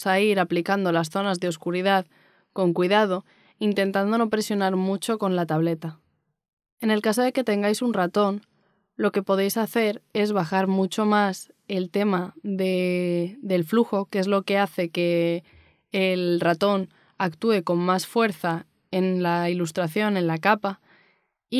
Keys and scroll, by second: 5.7 z, 19.9 x.